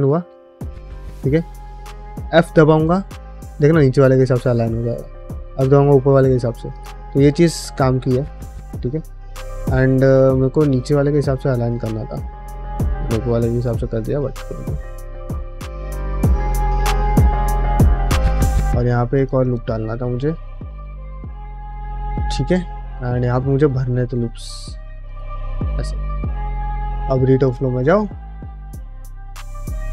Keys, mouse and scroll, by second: 6.9 middle click, 7.3 ctrl+r, 9.5 middle click, 10.4 g, 18.0 middle click, 18.4 ctrl+r, 19.6 middle click, 19.9 middle click, 20.2 middle click, 20.9 middle click, 22.0 shift+middle click, 22.2 scroll down 1, 22.8 ctrl+r, 25.6 middle click, 26.0 middle click, 27.3-29.9 drag.